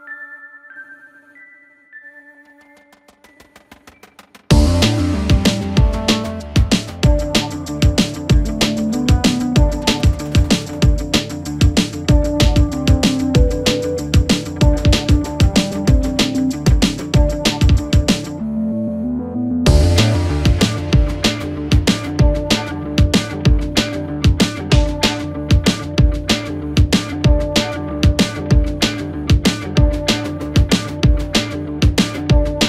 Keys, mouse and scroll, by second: 0.2-0.8 scroll down 1, 0.8-1.4 scroll up 3, 1.4 g, 3.8-4.2 scroll down 6, 4.2 Tab, 4.7-5.8 middle drag, 5.8 KP_1, 6.5-7.7 scroll up 2, 7.7 click, 8.7 click, 9.1 scroll up 2, 9.4 scroll down 1, 9.7 Tab, 10.5-10.8 scroll down 2, 10.8 shift+middle click, 11.3-13.8 scroll up 2, 14.4-17.4 drag, 18.1-19.7 drag, 22.6 click, 23.3 s, 23.9 s, 24.7 s, 25.1-25.5 scroll up 2, 25.5 s, 28.2 KP_3, 29.6 click, 31.6 r.